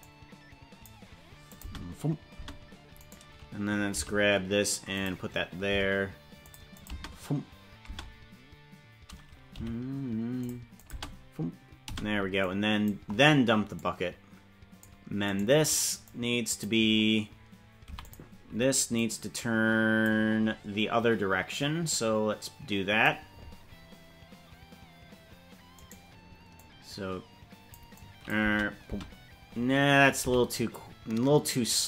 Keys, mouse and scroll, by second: 0.0 click, 1.4 click, 1.6 space, 2.4 space, 3.0 right click, 4.0 g, 5.6 g, 6.7 click, 6.8 space, 7.8 space, 9.5 g, 10.7 click, 10.9 space, 11.9 space, 12.4 click, 13.7-14.8 drag, 15.3 right click, 16.0 click, 17.8 i, 18.9-20.0 drag, 21.8-23.0 drag, 25.9 right click, 26.5-27.7 drag, 27.9 click, 28.5 space, 28.9 space, 30.0 right click, 30.2 g.